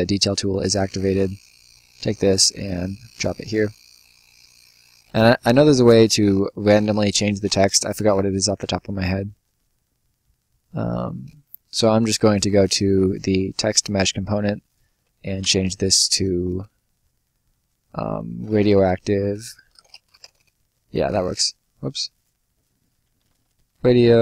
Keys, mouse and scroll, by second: 0.5 click, 3.6 click, 4.4 Escape, 4.9 click, 12.0 click, 14.4 click, 18.1-20.5 typing, 20.8 Escape, 21.9 click, 22.9-24.2 typing.